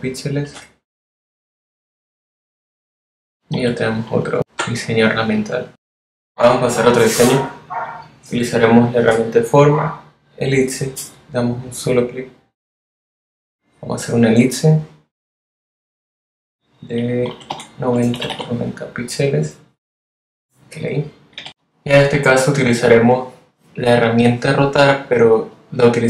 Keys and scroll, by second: 16.7-18.4 typing, 21.0 v.